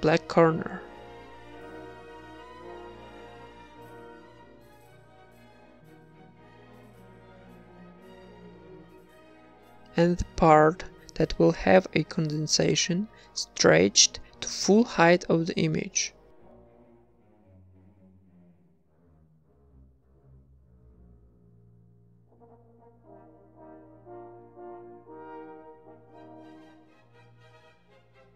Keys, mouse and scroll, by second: 0.1 Tab, 0.5 ctrl+s, 0.9 Tab, 1.4 ctrl+Tab, 1.8 a, 3.6 ctrl+Tab, 4.2-8.2 typing, 6.6 Tab, 11.3 click, 12.7 Tab, 13.3 s, 14.0 s, 15.7 click, 16.4 ctrl+r, 17.2 ctrl+r, 18.0 middle click, 18.6 a, 18.7 a, 19.0 a, 19.2-20.1 right drag, 19.6 g, 21.4 a, 21.6 right click, 22.0 g, 22.7 Tab, 23.4 Tab, 23.7 middle click, 24.7 Tab, 25.0 right click, 25.5 Tab, 25.9 a, 26.1 a, 26.3 u, 27.9 s.